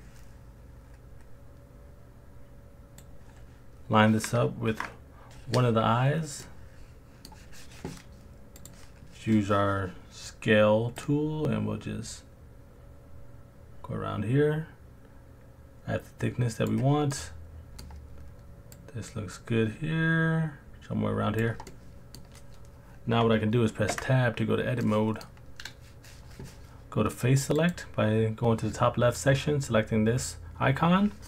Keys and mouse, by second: 6.4-7.3 middle drag, 8.6 click, 11.1 click, 17.1 middle click, 18.9 click, 19.3 click, 21.7-22.2 middle drag, 23.9 Tab, 24.8 middle click, 27.7 click.